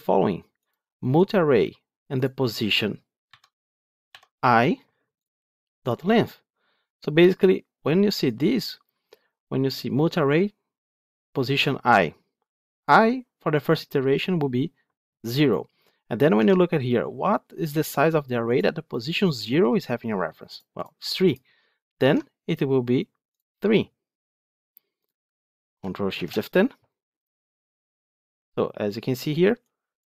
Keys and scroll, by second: 26.0 ctrl+shift+F10.